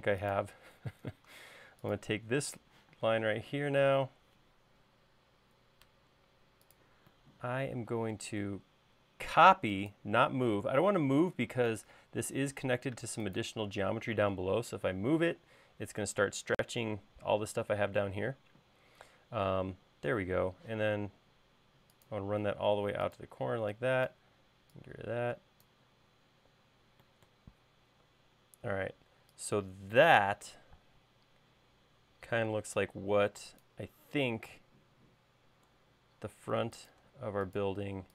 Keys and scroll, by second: 1.5 space, 3.6 q, 6.5 Up, 15.0 space, 20.2-21.4 typing, 24.1 e, 31.6 space, 33.1 l.